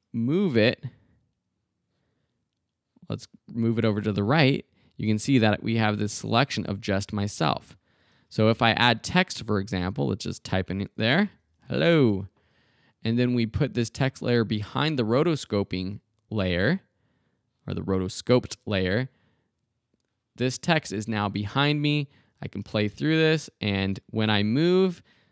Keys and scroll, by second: 7.2 shift+super+z, 8.0 super+z, 10.8-12.1 typing, 22.6 space, 24.7 space.